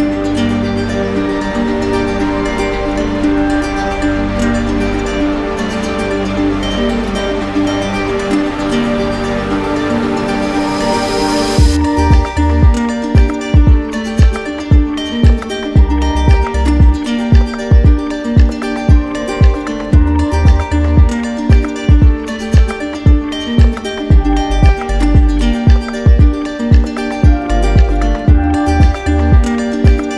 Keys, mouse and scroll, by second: 4.8-6.0 drag, 6.3 click, 6.4 ctrl+z, 8.1 click, 8.6 ctrl+z, 18.7 click, 19.7 shift+click, 20.9 right click, 22.5 right click.